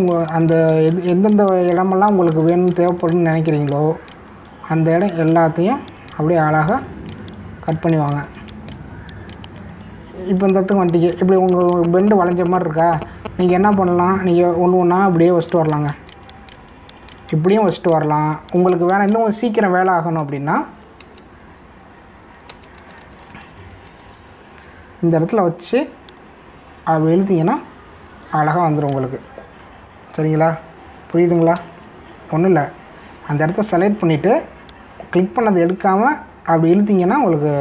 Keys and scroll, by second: 3.9 space, 20.9 ctrl+alt+z, 23.5 ctrl+alt+z, 32.6 ctrl+alt+z.